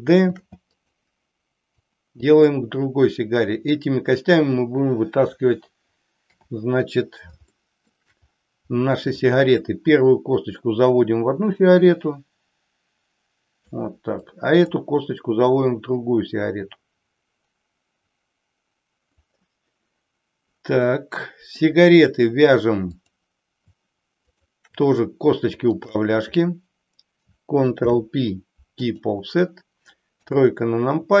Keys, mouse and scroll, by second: 0.2 shift+d, 1.8-5.4 drag, 6.2 KP_7, 7.6 shift+middle click, 9.4 click, 10.6-13.6 drag, 14.4 click, 15.7-19.1 drag, 20.9 middle click, 23.0 click, 24.2 shift+click, 25.6 shift+click, 27.7 ctrl+p, 30.3 KP_3.